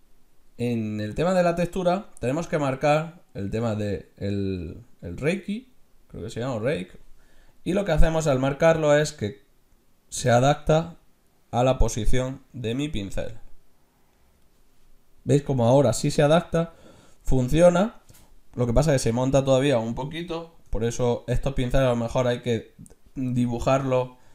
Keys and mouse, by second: 1.0-3.4 middle drag, 3.4-5.2 drag, 9.2-11.0 drag, 15.7-17.6 middle drag, 21.1 ctrl+z.